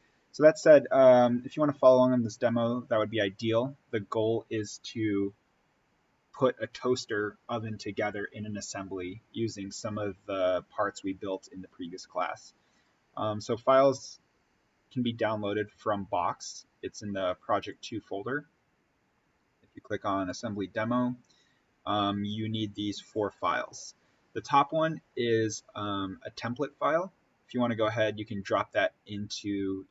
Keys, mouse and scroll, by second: 12.7 click, 17.6 click.